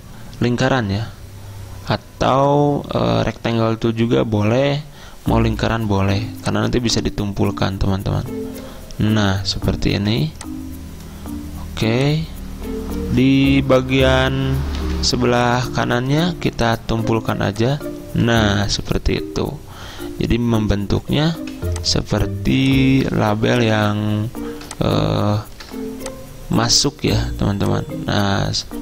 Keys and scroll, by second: 10.1 v, 14.9 a, 21.4 v.